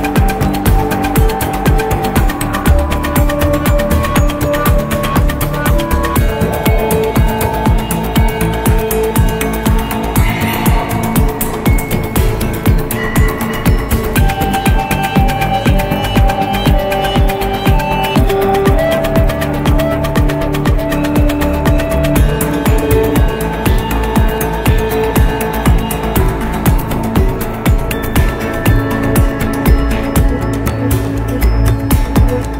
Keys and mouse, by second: 0.2 Tab, 0.7 middle click, 1.8 2, 3.6 click, 5.9-7.1 middle drag, 9.5 middle click, 11.8-14.2 middle drag, 14.9-16.0 middle drag, 17.0 3, 17.4 middle click, 22.2 x, 24.3-26.7 middle drag, 28.1 2, 29.4 click, 30.9 middle click.